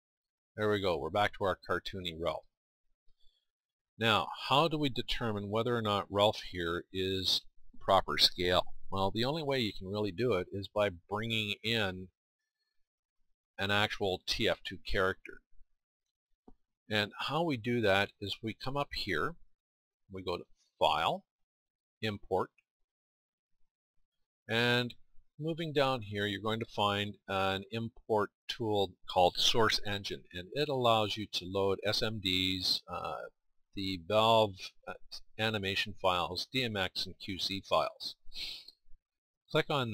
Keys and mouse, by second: 0.8-6.3 middle drag, 6.3 KP_1, 20.8-26.1 drag.